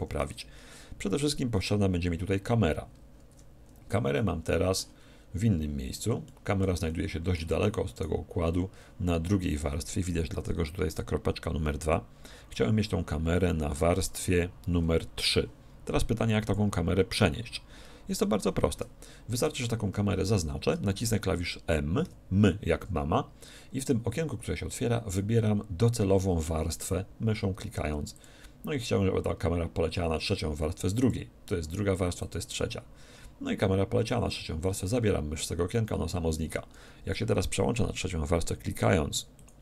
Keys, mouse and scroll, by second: 3.3 2, 4.1-5.9 middle drag, 5.9 scroll up 1, 6.1 scroll down 1, 6.3-8.8 middle drag, 7.9-9.8 right drag, 13.7 3, 16.4-18.1 drag, 22.0 m, 39.3-39.6 drag.